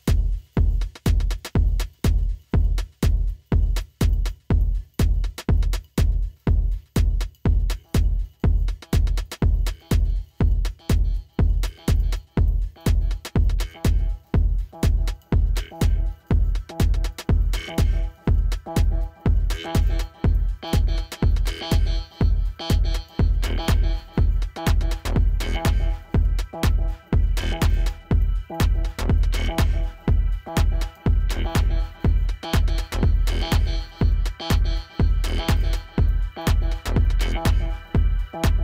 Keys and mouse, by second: 6.1 click, 8.5 click, 11.9 =, 21.5 -, 24.0 click, 27.0 click, 32.4 click.